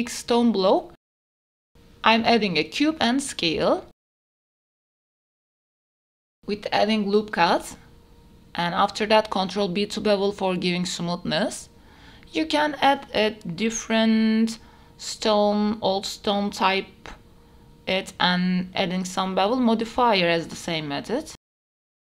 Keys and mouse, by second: 1.0 KP_7, 2.4 middle drag, 2.7-5.0 typing, 3.4 shift+middle click, 4.7 Tab, 6.0 ctrl+r, 6.2 click, 6.4 ctrl+r, 6.4 x, 7.6 click, 8.0 ctrl+b, 11.4 Tab, 11.6 middle click, 12.8 KP_7, 13.7 ctrl+s, 14.5 drag, 15.0-15.7 drag, 16.6-17.0 middle drag, 17.4 shift+middle drag, 18.5 right click, 19.2-20.8 right drag, 20.8-21.2 middle drag, 21.3 middle click.